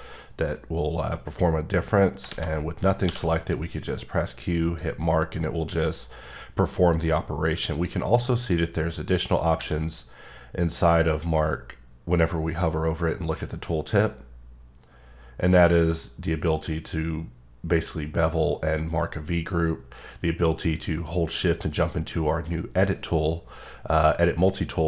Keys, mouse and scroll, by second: 3.5 click, 7.8 click, 8.4 click.